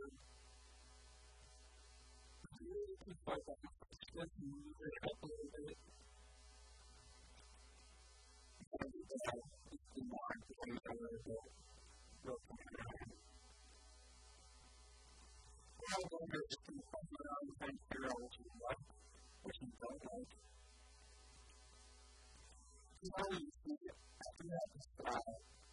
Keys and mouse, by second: 2.9 a, 3.0 b, 4.0-6.0 drag, 4.9 a, 5.1 b, 6.8-8.0 drag, 8.0 KP_1, 8.8 a, 9.0 b, 10.4-12.0 drag, 11.2-15.9 typing, 12.2 right click, 12.6 right click, 15.3 right click, 18.4 click, 18.7 s, 20.0-21.8 drag, 20.2 KP_1, 20.4 KP_3, 20.8 KP_1, 24.0 s.